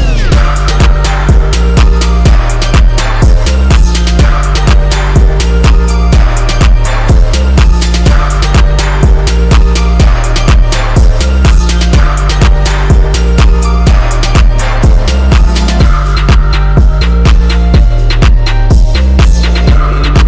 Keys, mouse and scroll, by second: 1.7 click, 2.3 click, 3.4 click, 7.0 scroll up 1, 7.3 click, 8.4 click, 12.5-18.4 drag.